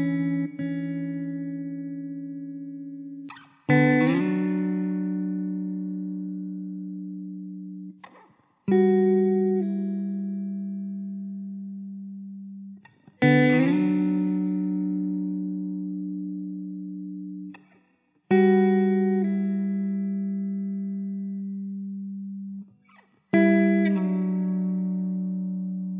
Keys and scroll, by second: 25.3 Tab.